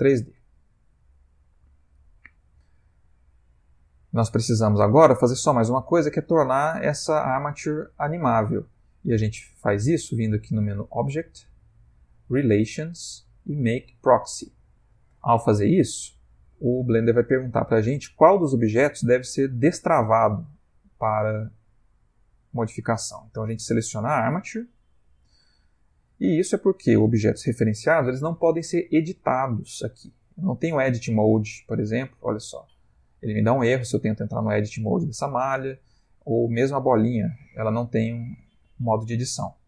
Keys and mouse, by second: 0.7 ctrl+middle click, 1.9 middle click, 3.3 click, 4.2 click, 5.4 g, 10.8 click, 26.1 ctrl+middle click, 28.6 shift+middle click, 30.9 Tab, 34.1 click, 34.8 click, 35.6 click, 36.2 g, 37.4 Tab, 38.4 Tab.